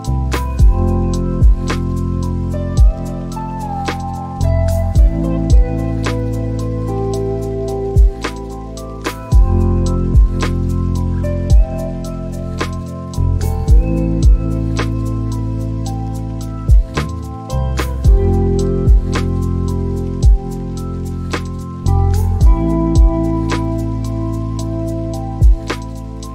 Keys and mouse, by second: 0.4 Escape, 2.3 click, 6.1 click, 18.1 click, 19.8 g, 24.7 click, 25.4 middle click.